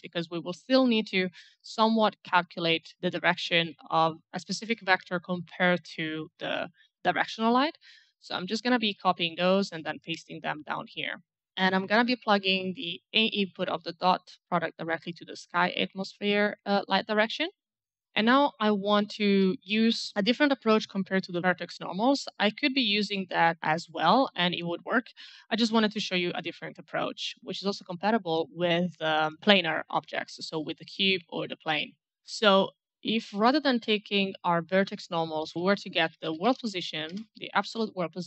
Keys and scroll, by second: 8.6 ctrl+c, 9.9 ctrl+v, 35.7-37.2 typing, 38.0 Return.